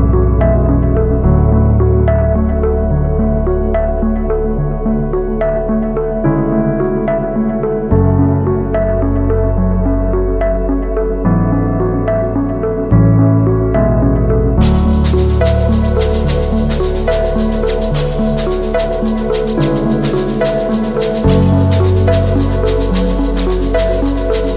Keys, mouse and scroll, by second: 16.1 alt+scroll up 1, 19.6-23.3 scroll down 1, 23.3-23.9 scroll up 1.